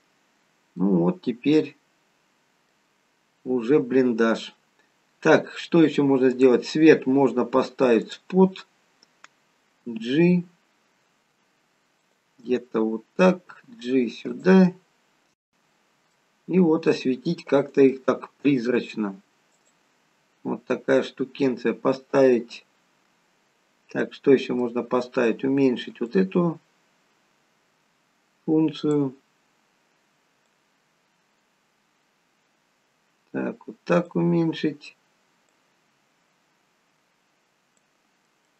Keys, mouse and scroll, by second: 0.6-0.9 scroll down 1, 0.9 middle click, 3.3-3.8 scroll down 2, 6.4 click, 8.1 click, 9.9 g, 12.5 middle click, 13.6 g, 14.7 middle click, 16.5 g, 17.9 middle click, 18.7 g, 19.9-20.8 scroll down 4, 20.8-21.5 scroll down 5, 21.5-22.9 scroll down 1, 24.3 middle click, 26.0 click, 30.4 click, 35.4 click, 38.2 middle click, 38.2-38.5 scroll up 5.